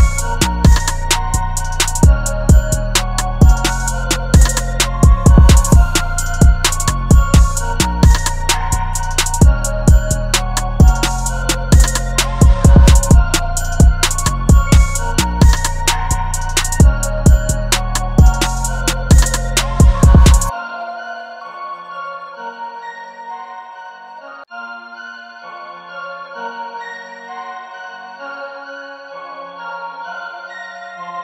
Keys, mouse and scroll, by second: 2.8 ctrl+t, 5.9 alt+shift+click, 8.4 Return, 22.4 double click, 23.3-25.4 scroll down 1, 25.4 double click.